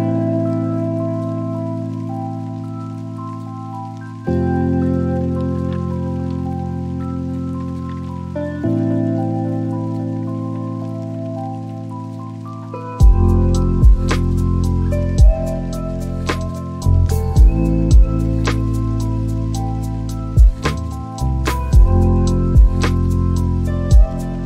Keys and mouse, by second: 1.9 click, 7.2 click, 16.1 click, 20.0 click, 21.4 click, 22.3-24.4 drag.